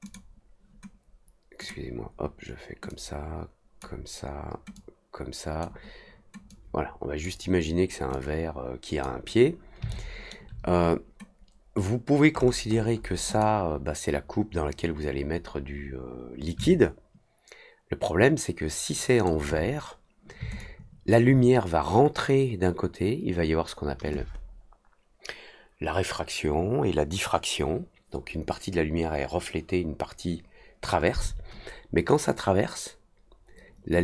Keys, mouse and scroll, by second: 0.0 click, 1.5 click, 2.8-3.7 drag, 4.7 click, 6.4 click, 8.1 click, 9.8-10.2 alt+middle drag, 12.3 middle click, 12.6 middle click, 12.9 middle click, 13.2 click, 16.6-19.2 alt+drag, 20.5-21.1 alt+drag.